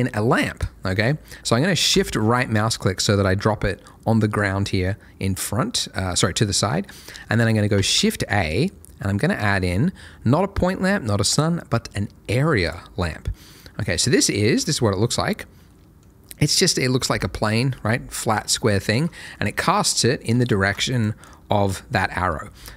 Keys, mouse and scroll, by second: 1.9 shift+right click, 2.7 middle click, 7.7 shift+a, 12.6 click, 13.6 scroll down 1, 14.0 middle click, 14.3 scroll down 1, 14.5 z, 15.6 middle click, 18.4 scroll down 1, 18.7 shift+middle click, 19.1 shift+scroll down 1, 19.3 middle click, 20.8 ctrl+shift+click, 21.2 double click, 22.0 Escape, 22.5 r.